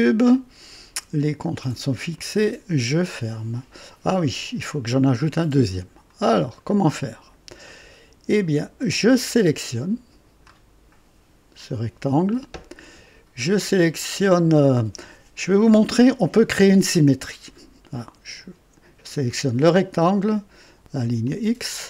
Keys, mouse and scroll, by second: 0.0 typing, 2.1 click, 4.4 click, 5.6-6.1 right drag, 6.3-6.6 scroll up 1, 6.8-7.5 right drag, 7.7 right click, 9.1-10.6 drag, 21.2 click.